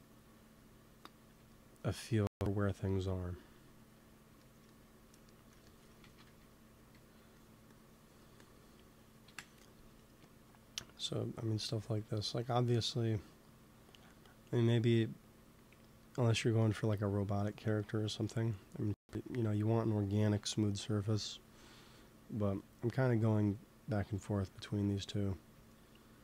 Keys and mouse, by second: 0.5 middle click, 4.3 middle click, 5.9 shift+c, 6.2 f, 6.7 f, 7.3-9.2 drag, 9.2 KP_1, 11.2-13.2 drag, 11.7 ctrl+s, 15.9-17.5 middle drag, 20.3 KP_1, 20.9 KP_3, 21.8 click, 25.7-26.2 drag.